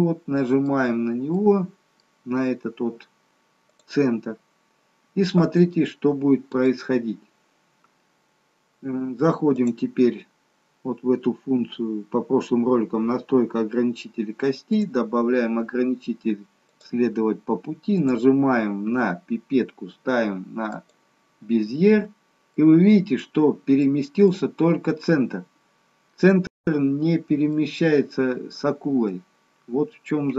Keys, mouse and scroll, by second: 0.0 middle click, 0.9-1.5 scroll down 3, 1.5 middle click, 5.9 middle click, 9.6 click, 14.9 click, 18.1 click, 22.7 middle click, 24.0 middle click, 27.3 middle click, 29.0 middle click.